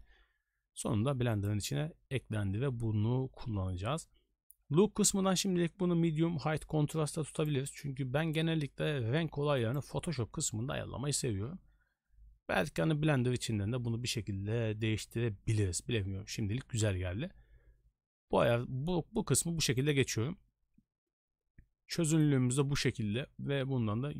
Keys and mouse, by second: 7.5 click, 21.9 click.